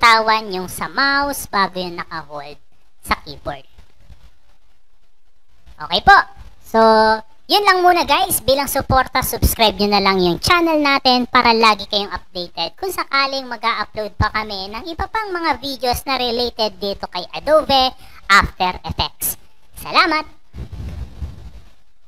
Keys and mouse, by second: 2.4-5.7 drag, 6.7 BackSpace, 22.0 click.